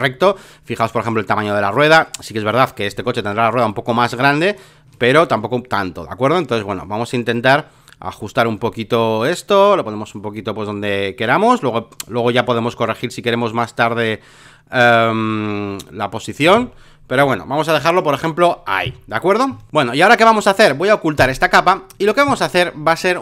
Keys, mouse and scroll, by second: 3.0 alt+middle click, 3.6-16.4 drag, 16.4 Return, 17.3 alt+middle click, 18.4 alt+middle click, 19.7-23.2 drag.